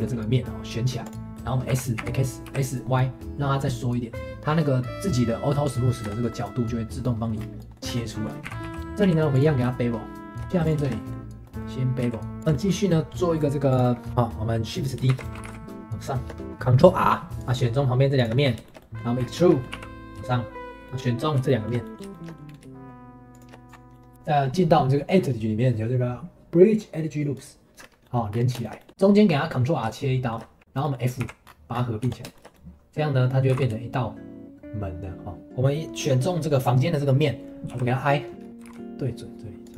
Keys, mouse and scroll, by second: 0.4 middle click, 1.0 click, 1.3 middle click, 1.7 s, 5.8 middle click, 6.0 Tab, 6.3-7.4 middle drag, 7.4 scroll down 2, 7.6-7.9 middle drag, 7.9 Tab, 8.1 middle click, 8.4 s, 8.8 middle click, 9.0 q, 10.4 scroll up 3, 10.6 click, 10.8-12.0 shift+middle drag, 12.0 q, 12.4-13.7 shift+middle drag, 13.7 click, 14.1 middle click, 15.1 shift+d, 15.3 g, 16.4 ctrl+r, 17.3 3, 17.4 click, 18.2 shift+click, 18.4 scroll down 2, 18.6 shift+middle click, 19.2 scroll down 3, 19.4 shift+middle click, 19.7 e, 20.7 click, 20.8-22.4 shift+middle drag, 22.4-23.3 scroll down 1, 23.3 shift+click, 23.7 scroll up 1, 23.9 middle click, 27.8 scroll up 1, 28.0 middle click, 28.3-29.0 scroll down 5, 28.6 shift+middle click, 29.0 middle click, 29.3-29.8 scroll up 4, 29.8 scroll up 1, 29.9 shift+middle click, 30.6 scroll down 1, 30.8 middle click, 31.2 f, 31.4-32.0 scroll down 7, 32.0 Tab, 32.3-33.5 shift+middle drag, 33.5 g, 35.5-37.7 middle drag, 37.7 i.